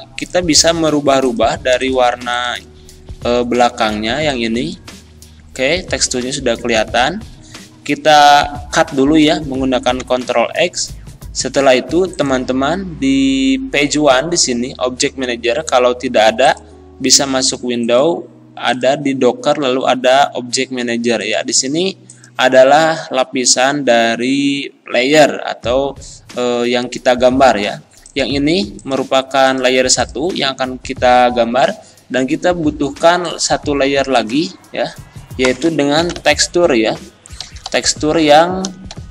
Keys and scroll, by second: 6.8 ctrl+z, 10.0 ctrl+x, 36.0 t, 36.1 e, 36.1 k, 38.6 BackSpace, 38.9 r.